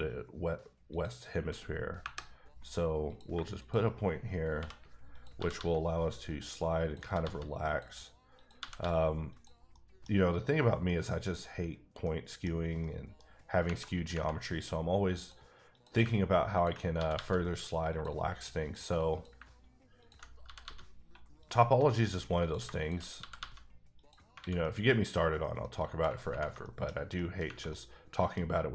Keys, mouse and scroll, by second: 0.9 click, 2.0 KP_Enter, 3.1 click, 3.3 shift+click, 4.2 click, 4.6 j, 5.1 click, 5.4 g, 5.5 g, 6.3 click, 6.8 click, 7.0 g, 7.2 g, 7.7 click, 8.4 click, 8.6 g, 8.8 g, 9.3 click, 9.7 middle click, 10.1-11.7 scroll up 2, 11.7-12.0 scroll down 1, 12.0 middle click, 12.5 scroll down 1, 12.8 middle click, 13.8 middle click, 15.2 click, 15.7 click, 16.5 ctrl+click, 16.9 g, 17.1 g, 17.9 click, 18.6 click, 19.3 click, 20.0 ctrl+click, 20.4 g, 20.6 g, 21.4 click, 21.8 middle click, 22.4 click, 23.2 g, 23.3 g, 23.9 click, 24.4 alt+a, 24.6 middle click, 26.6 shift+middle click, 26.9 shift+scroll down 2, 27.1 middle click, 27.7 middle click.